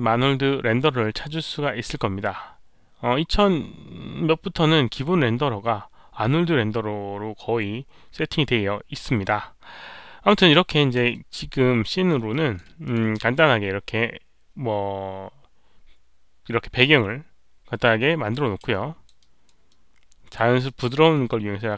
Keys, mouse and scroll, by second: 9.8-10.7 scroll down 2, 11.1 alt+middle click, 11.8 alt+right click, 12.0 alt+middle click, 12.3 alt+click, 12.5 alt+middle click, 12.8 alt+click, 16.6 alt+click, 16.6 alt+right click, 16.6 alt+middle click, 18.7 alt+click, 18.7 alt+middle click, 19.1 alt+right click, 19.6-20.3 alt+drag, 20.6 alt+click.